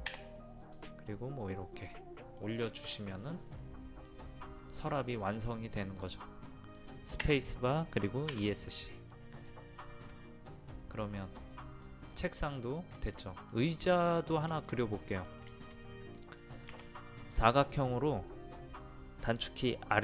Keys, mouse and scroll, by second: 0.1 p, 0.6 click, 2.9 middle click, 3.6 scroll down 1, 8.3 Escape, 9.1 middle click, 9.4-10.1 scroll down 1, 10.1 middle click, 11.8 scroll down 1, 13.0-16.9 shift+middle drag, 17.6 click.